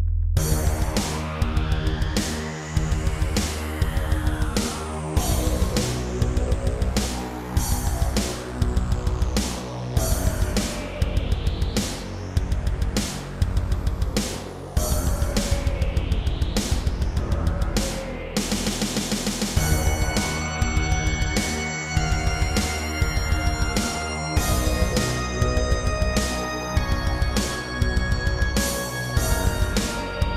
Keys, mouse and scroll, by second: 0.5 a, 1.0 b, 1.2 click, 2.8 x, 3.8 3, 5.2 click, 6.3 click, 7.6 click, 8.5 shift+middle click, 8.8 scroll up 2, 9.2 middle click, 10.5 scroll up 1, 11.3 click, 12.1 click, 13.5 shift+click, 14.1-14.5 scroll down 2, 14.5-14.9 typing, 15.9 /, 16.5 scroll down 3, 16.9 middle click, 17.7 shift+middle click, 18.2 middle click, 20.1 shift+middle click, 27.3 scroll down 3, 27.7 shift+middle click, 28.2 middle click, 28.9-29.2 scroll up 2, 29.2 middle click, 30.0 middle click.